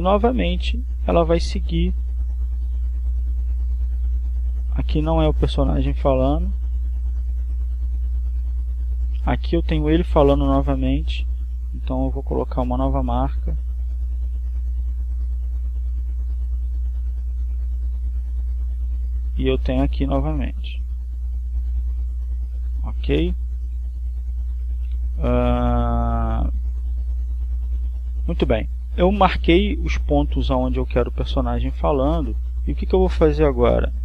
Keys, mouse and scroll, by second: 2.6-11.4 drag, 13.9 click, 15.4-21.6 drag, 22.4 click, 23.2 click.